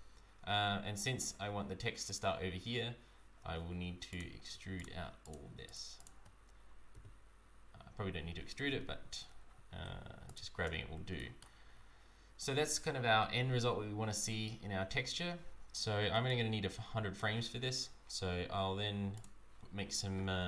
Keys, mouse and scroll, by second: 4.1 click, 4.7 shift+click, 6.1 click, 6.9 e, 10.9 Tab, 10.9 scroll down 1, 11.1 shift+middle click, 11.7 scroll up 1, 13.0 scroll up 2, 16.2 right click, 19.1 click.